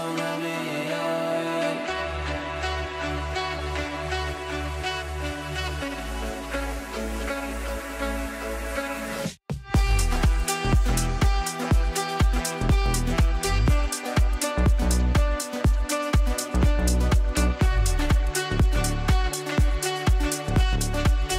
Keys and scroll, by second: 0.2 space, 10.8 ctrl+z, 13.0 ctrl+z, 15.1 g.